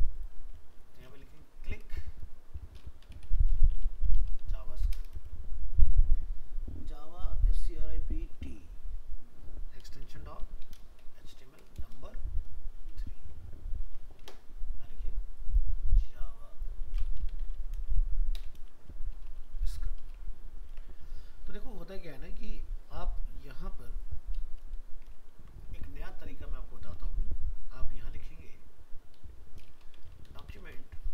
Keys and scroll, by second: 0.6 alt+f, 0.7 alt+移, 13.9 ctrl+s, 20.6 ctrl+s, 25.4 ctrl+s.